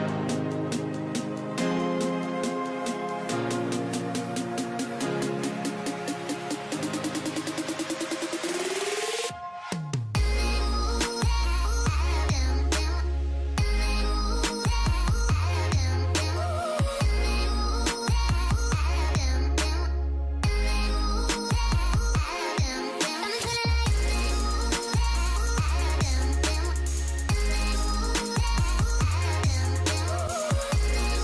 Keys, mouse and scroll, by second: 2.7 ctrl+i, 3.4-5.2 drag, 8.6 ctrl+i, 8.9 double click.